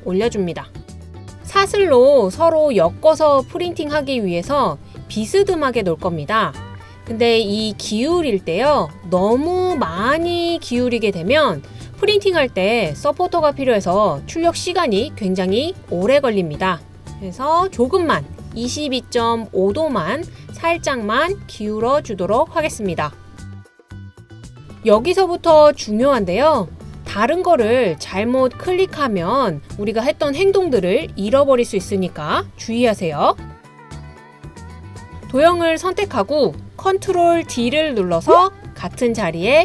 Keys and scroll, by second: 34.5 BackSpace, 37.9 super+d.